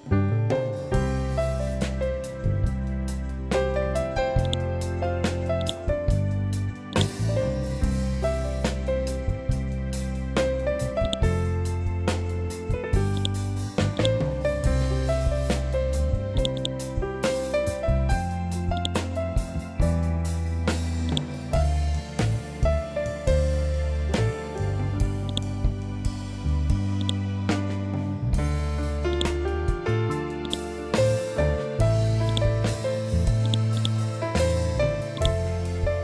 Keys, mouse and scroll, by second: 6.4 right click, 7.3 ctrl+q, 9.0 ctrl+z, 10.5 click, 15.8 click, 16.9 scroll down 1, 18.2 click, 19.2 scroll up 1, 20.6-24.1 drag, 24.1 scroll down 1, 24.8 click, 25.5 scroll up 1, 26.4 click, 29.3 ctrl+z, 29.9 right click, 31.8 click, 33.2 right click, 34.6 click.